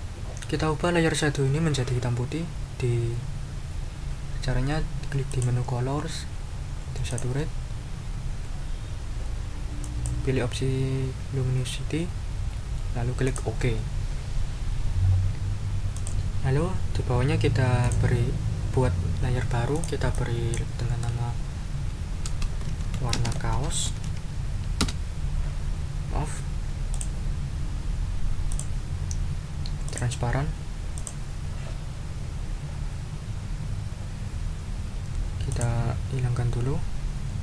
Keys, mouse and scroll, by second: 5.3 click, 7.1 click, 9.8 click, 13.2 click, 15.9 click, 17.8 click, 19.7-20.7 scroll up 4, 21.9-24.5 typing, 24.8 Return, 26.9 click, 28.5 click, 29.8 click, 31.0 click, 35.5 click.